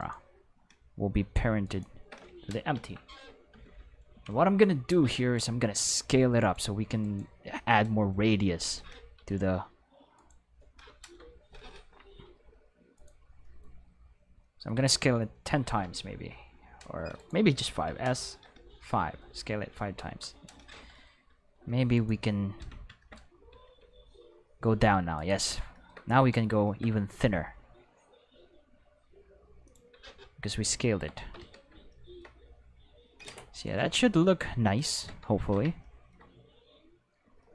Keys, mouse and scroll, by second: 0.0 right click, 1.6 shift+right click, 2.7 ctrl+p, 3.5 Return, 4.4 Home, 5.6 middle drag, 7.0 right click, 9.2 s, 11.0 Home, 12.2 s, 12.9 right click, 14.7 s, 15.7 1, 17.2 right click, 17.9 s, 18.4 5, 19.1 Return, 20.0 Home, 21.9 click, 22.6 Tab, 23.6 alt+s, 25.2 right click, 25.8 shift+middle click, 27.2 alt+s, 29.6 click, 29.9 Tab, 31.4 alt+a, 35.4 ctrl+s.